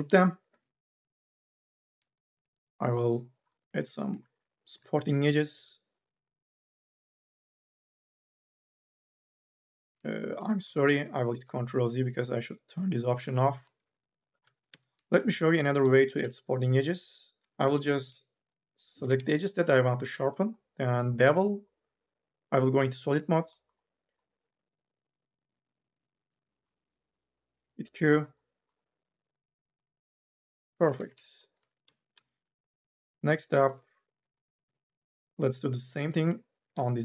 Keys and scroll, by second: 0.6 alt+g, 3.5 2, 4.5 k, 4.8 l, 5.4 q, 7.1 q, 8.7 ctrl+z, 9.0 ctrl+z, 9.8 ctrl+z, 10.9 ctrl+z, 14.4 2, 17.8 ctrl+z, 27.5 q, 31.6 2, 34.5 2, 34.7 q.